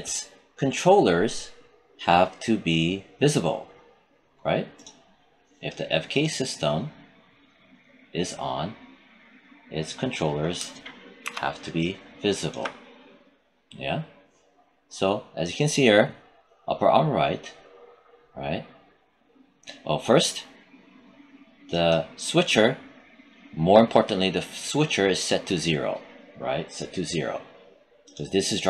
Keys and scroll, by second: 11.1 alt+5.